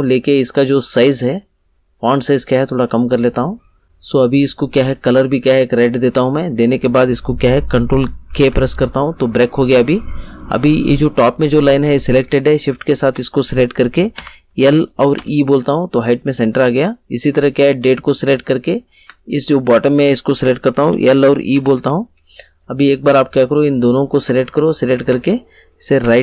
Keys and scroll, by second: 8.2 ctrl+k, 14.1 l, 15.1 e, 20.7 l, 21.5 e, 26.0 Right.